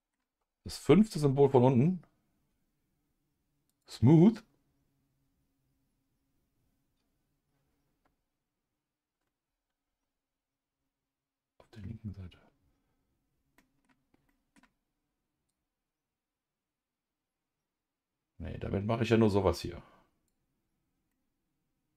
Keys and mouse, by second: 3.7 click, 13.6 middle click, 14.3 middle click, 15.5-20.3 drag, 21.1-21.9 middle drag.